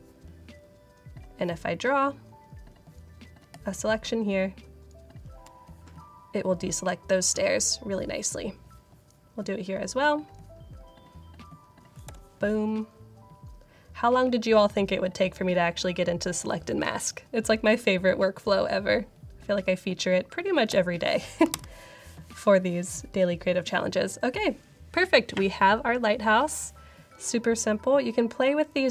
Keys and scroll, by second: 12.0 Return, 20.6 Return, 21.4 super+0.